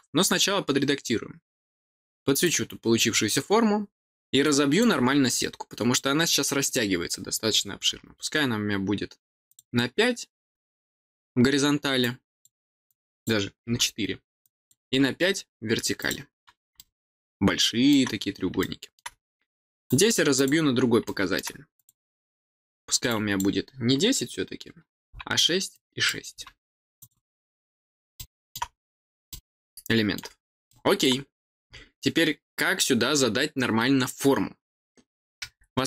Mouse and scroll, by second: 2.3 click, 4.4 click, 9.4 click, 11.9 click, 12.8 click, 14.4 click, 15.9 click, 16.7-17.8 middle drag, 18.5 middle click, 19.8 click, 20.3 click, 21.0 middle click, 21.7 click, 23.0 click, 25.7 click, 26.9 click, 28.1 middle click, 29.2 middle click, 30.6 middle click.